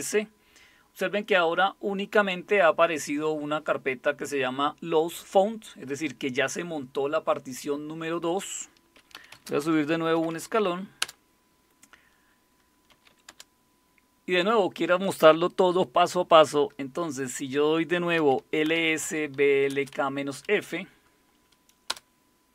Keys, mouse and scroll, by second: 8.9-11.0 typing, 12.7-13.6 typing, 17.9-20.3 typing, 21.9 Return.